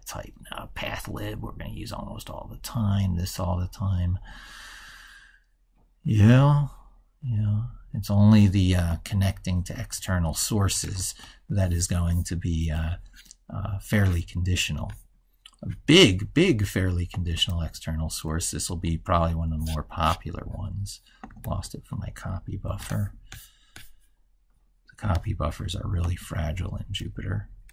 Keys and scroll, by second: 10.8 ctrl+x, 17.3 ctrl+c, 21.4 ctrl+z, 22.5 ctrl+x, 27.0 ctrl+v.